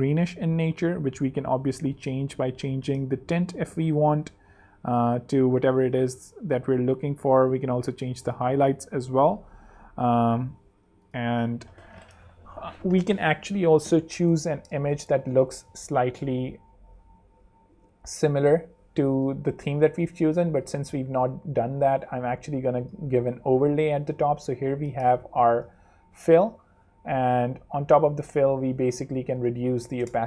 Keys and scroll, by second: 0.6 super+space, 1.0 super+z, 1.9 z, 8.6 super+z, 9.3 super+Escape, 9.6 super+z, 11.2 super+3, 14.2 super+2, 14.7 super+space, 23.9 Escape, 27.8 Escape, 29.5-30.2 typing.